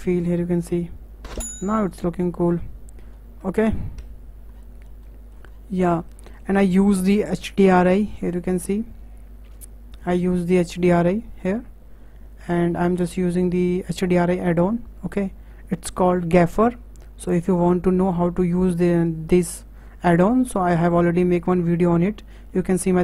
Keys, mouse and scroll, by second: 0.2 click, 4.0 KP_0, 4.6-5.1 scroll down 10, 5.1-5.5 middle drag, 5.5-6.0 scroll down 7, 6.0-7.8 shift+middle drag, 7.8 click, 8.5 click, 10.3-13.8 drag, 13.8-14.4 scroll down 3.